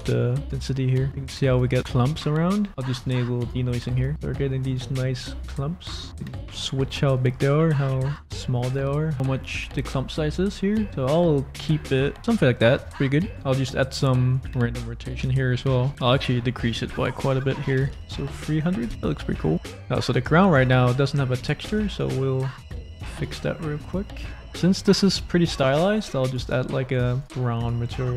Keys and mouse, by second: 1.6 click, 3.4 click, 6.1-8.4 drag, 8.4 middle click, 9.1-11.6 middle drag, 11.8 click, 11.9 middle click, 13.1 middle click, 14.3 click, 15.5 click, 16.0-18.9 drag, 17.9 0, 19.2 middle click, 19.8 middle click, 22.0 click, 23.0 click, 26.3 click, 27.0 click, 27.2 click, 27.6 click.